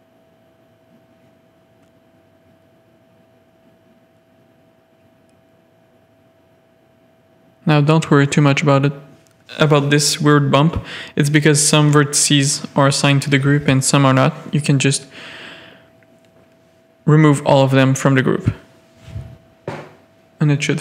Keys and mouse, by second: 0.3 click, 1.5 shift+middle click, 1.9 click, 2.8 shift+middle click, 3.0 click, 3.4 e, 7.6 shift+click, 9.5 e, 11.7 e, 12.8 middle click, 13.9 KP_7, 14.9 z, 15.2 a, 15.8 click, 16.5 z, 17.5-18.6 drag, 19.0 alt+shift+click.